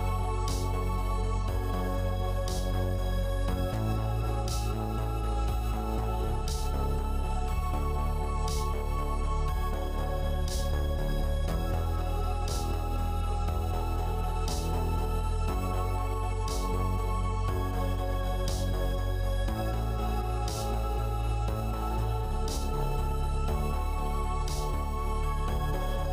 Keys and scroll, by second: 21.8 0.